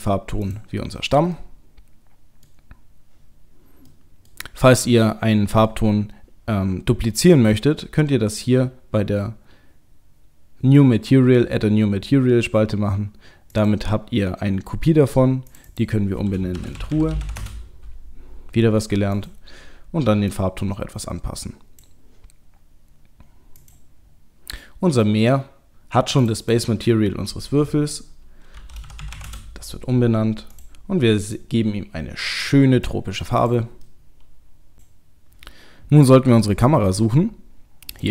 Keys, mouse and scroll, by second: 1.3 middle click, 4.8 middle click, 13.5 click, 15.5 click, 19.2 click, 23.6 click, 24.0-25.8 scroll down 2, 26.2 click, 26.4 click, 29.0 e, 30.5 click, 33.3 click, 33.9 middle click, 36.3 middle click, 37.1-37.9 scroll down 1, 37.9 click, 37.9 scroll down 4.